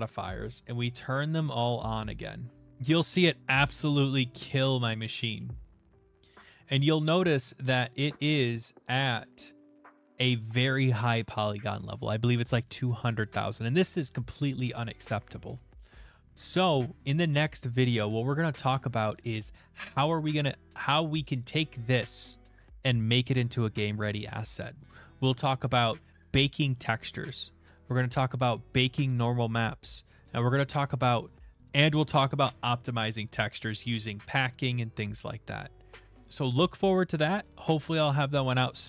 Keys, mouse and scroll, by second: 1.3 middle click, 1.9 click, 2.7 middle click, 2.7 middle click, 3.0 middle click, 3.0 middle click, 3.6 shift+middle click, 4.9 shift+middle click, 7.5 click, 8.2 click.